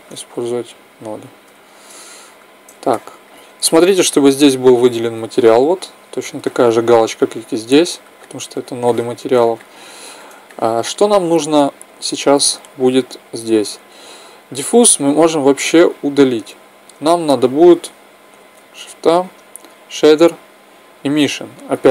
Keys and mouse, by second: 1.2 n, 8.0-12.0 middle drag, 13.9-15.5 drag, 16.0 x, 18.4 shift+a.